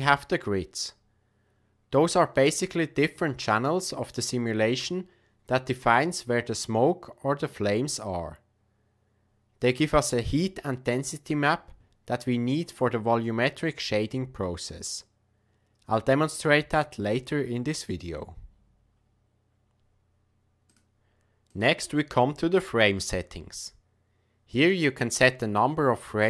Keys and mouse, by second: 0.0 click, 20.6 click, 21.5 click.